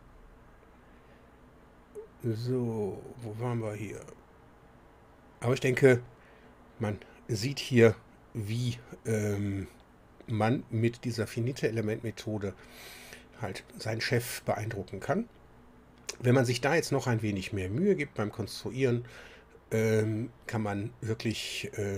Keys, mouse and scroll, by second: 3.9-21.9 drag.